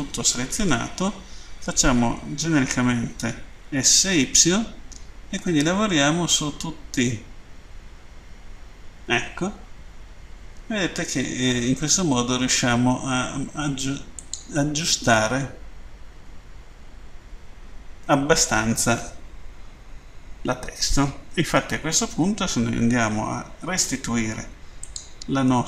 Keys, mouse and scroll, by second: 14.2 click, 15.2 middle click, 24.7 click.